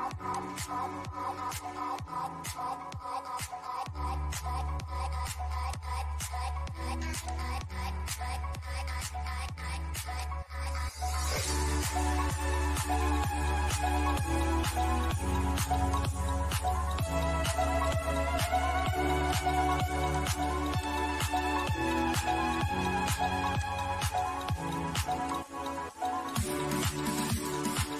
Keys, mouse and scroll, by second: 0.5-3.5 shift+middle drag, 3.5-6.5 drag, 7.3-9.4 shift+middle drag, 9.4 click, 15.1-18.5 drag, 22.8-24.5 drag, 25.5-27.3 shift+middle drag, 27.3 click.